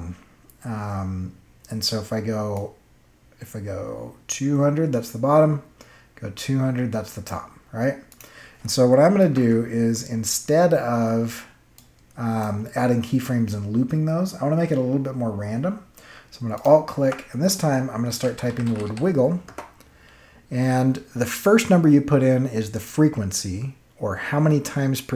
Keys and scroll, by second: 9.2 0, 9.4 Return, 17.8-19.3 typing, 19.4 Return.